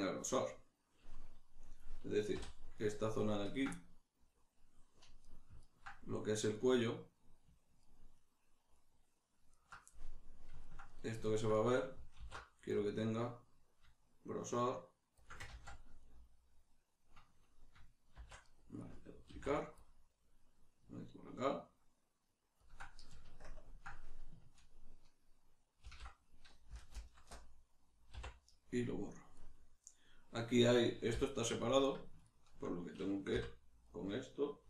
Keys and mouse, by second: 2.3 middle click, 2.3 3, 2.8 right click, 3.5 ctrl+right click, 3.7-5.2 middle drag, 5.2 right click, 5.6 ctrl+right click, 6.5 right click, 7.8 ctrl+right click, 8.2 ctrl+right click, 8.7 ctrl+right click, 9.5 ctrl+right click, 9.9-15.3 middle drag, 12.2 alt+e, 15.3 shift+click, 15.5 ctrl+z, 16.0-18.5 middle drag, 18.1 shift+d, 18.5 right click, 19.3 alt+e, 19.3-22.7 middle drag, 22.7 shift+click, 23.5 ctrl+KP_Add, 25.8 ctrl+i, 28.1 x, 29.3-30.6 middle drag, 30.6 right click, 31.1 l, 32.2-34.6 ctrl+middle drag, 33.3 l.